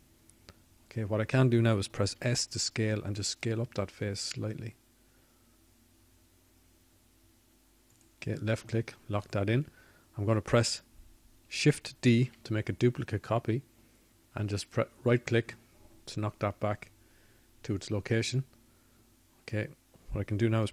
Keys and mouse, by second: 8.2 s, 18.2 shift+d.